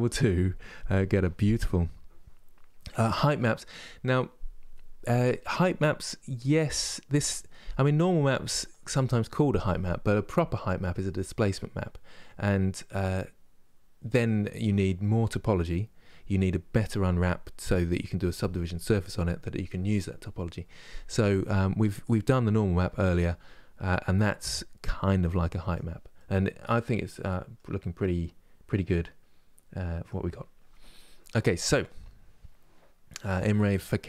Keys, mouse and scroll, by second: 25.8 middle click, 26.5-26.9 scroll down 1, 26.9-27.9 middle drag, 27.9-28.2 scroll up 3, 28.5-29.9 middle drag, 29.9-33.6 scroll up 1.